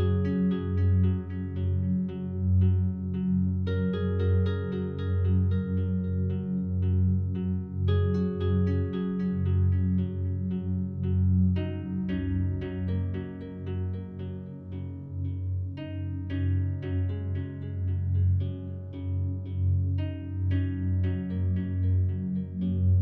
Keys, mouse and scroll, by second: 0.0 click, 0.9 s, 1.2 x, 4.5-7.6 drag, 7.6-11.6 alt+drag, 11.6-12.1 typing, 15.4-18.4 drag, 18.4-18.9 typing.